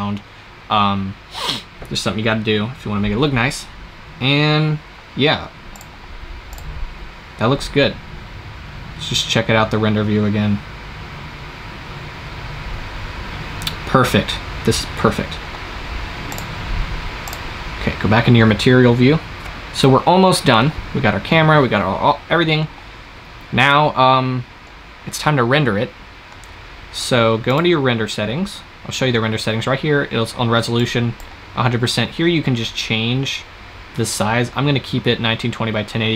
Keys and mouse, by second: 5.6-8.6 drag, 14.1-16.6 middle drag, 16.6-18.6 drag, 27.4-36.1 drag.